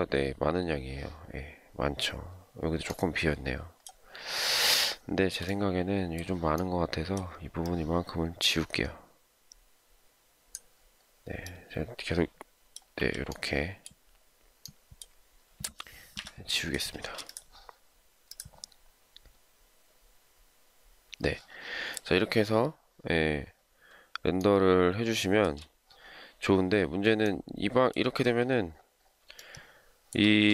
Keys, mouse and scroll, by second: 4.8 shift+middle click, 12.9 m, 16.0 Delete, 17.1 space, 24.4 shift+middle click, 29.4 shift+middle click.